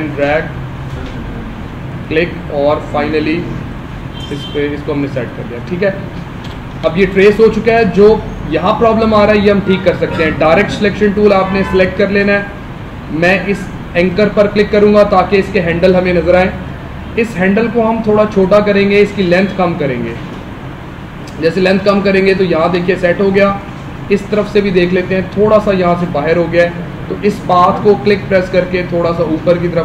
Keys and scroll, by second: 6.8 space, 22.7 space.